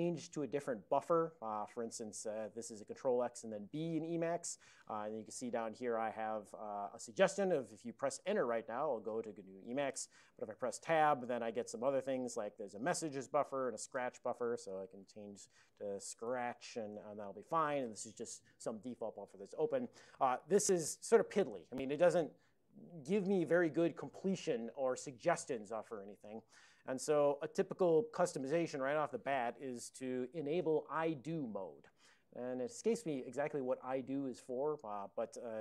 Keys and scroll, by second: 2.0 ctrl+x, 14.5-17.0 typing.